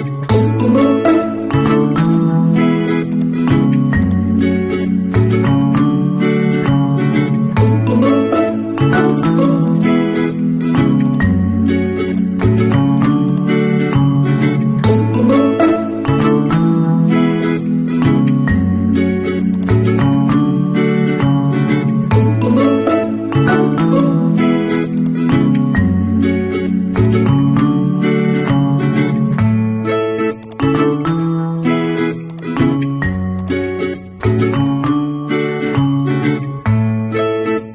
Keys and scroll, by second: 34.3 ctrl+a.